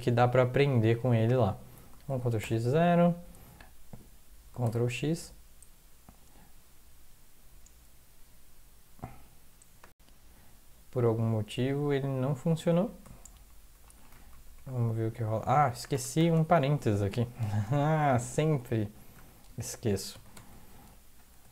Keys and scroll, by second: 2.1 ctrl+x, 2.4 0, 4.6 ctrl+x, 13.0 Down, 13.2 Down, 13.3 Down, 14.1 Down, 15.8 Return, 16.1 ), 17.9 Home, 18.4 Delete, 18.8 Delete, 19.1 BackSpace, 20.1 ctrl+x, 20.3 ctrl+s, 21.1 alt+F4.